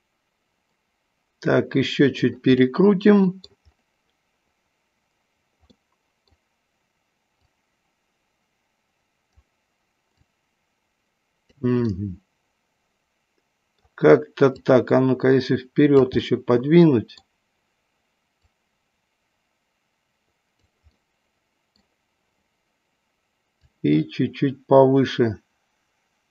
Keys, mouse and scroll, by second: 2.7-3.7 middle drag, 5.8 middle click, 7.5-9.4 drag, 10.3-11.5 drag, 12.0-14.0 middle drag, 14.6-16.0 drag, 16.3-17.4 middle drag, 18.3-20.7 drag, 21.0 middle click, 23.5-26.3 drag.